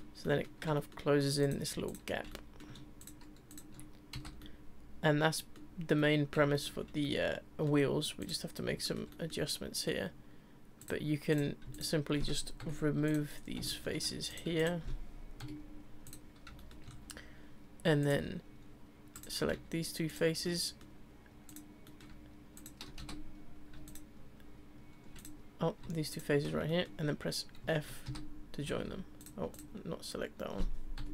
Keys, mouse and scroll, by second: 1.4 click, 1.8 shift+click, 2.3 middle click, 3.0 shift+click, 3.5 shift+click, 4.1 f, 4.4-8.2 middle drag, 8.2 click, 8.8-10.8 shift+middle drag, 10.8 click, 11.3 click, 11.7 shift+click, 12.6 Delete, 13.4 scroll down 2, 13.7 shift+middle click, 14.3 click, 14.6 shift+click, 15.4 Delete, 16.5-18.0 shift+scroll up 4, 16.6-16.9 shift+middle drag, 18.0 click, 19.1 click, 20.1 shift+click, 20.4 scroll up 1, 20.4-21.5 middle drag, 21.5 click, 21.8-22.5 middle drag, 22.5 shift+click, 23.0 f, 23.9 shift+click, 25.2 click, 26.1 shift+click, 26.7-28.0 middle drag, 28.0 f, 28.7 ctrl+z, 29.2 click, 29.5 click, 31.0 Delete.